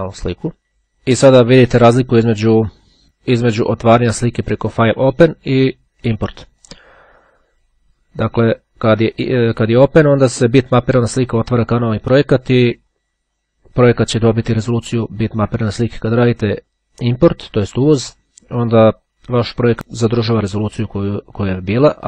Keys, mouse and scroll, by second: 3.6-5.2 drag, 6.7 click, 15.2 click, 18.2 click, 19.3-19.8 scroll down 1.